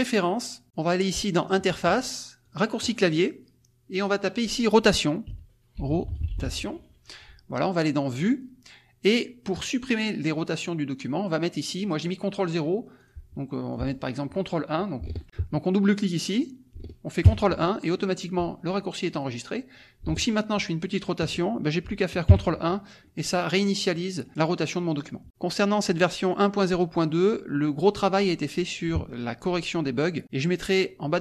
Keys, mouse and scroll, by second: 0.4 middle click, 0.4 scroll down 2, 0.6 click, 1.3 click, 2.6 click, 3.9 click, 5.0-6.9 typing, 8.2 click, 12.9 click, 13.7 click, 16.2 click, 17.2 ctrl+KP_1, 19.0 click, 20.0-21.4 ctrl+drag, 22.3 ctrl+KP_1, 23.0-24.3 drag, 25.9 click.